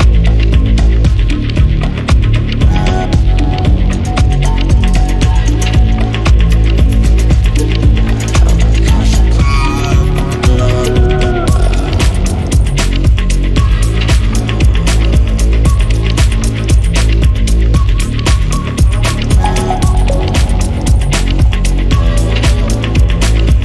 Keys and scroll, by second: 19.6 Escape.